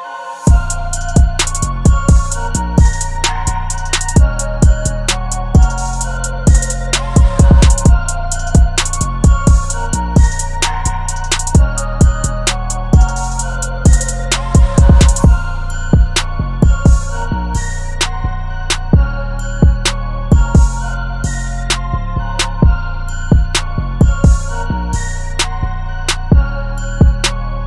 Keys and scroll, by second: 0.7 v, 8.6 b, 9.8 super+g, 11.6-13.2 typing, 14.3 super+t, 18.9 super+t, 20.8 super+t, 20.9 Left, 21.5 Up, 23.8 super+t.